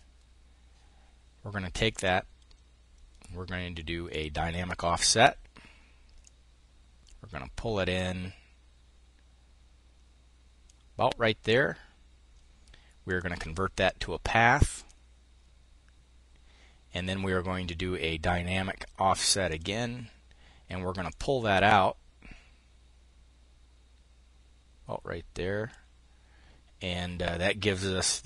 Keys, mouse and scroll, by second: 1.3 click, 3.5 click, 5.6-10.3 drag, 12.5 click, 14.2 click, 16.4 click, 18.9-20.1 drag, 20.5-25.3 drag.